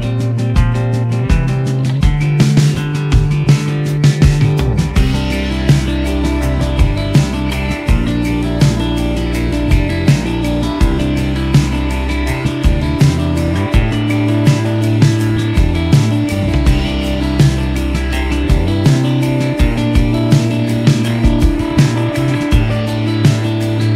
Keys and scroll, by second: 0.0-0.3 typing, 2.9 s, 3.6 g, 3.7 z, 5.8 g, 7.2 g, 12.1 g, 13.7 g, 21.3 ctrl+c, 22.9 ctrl+v, 23.2 ctrl+Return.